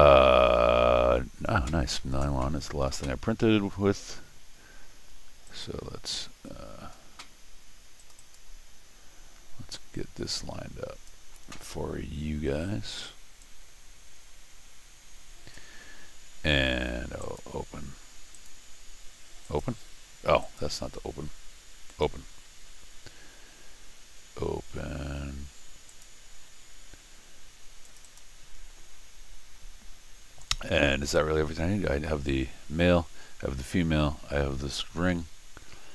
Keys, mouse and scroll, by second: 5.5 click, 8.0 click, 8.2 click, 9.8-11.1 drag, 13.4-15.5 drag, 17.2 click, 18.3 click, 19.5 click, 20.4 click, 21.9 click, 25.9 click, 27.9 click, 28.0 click.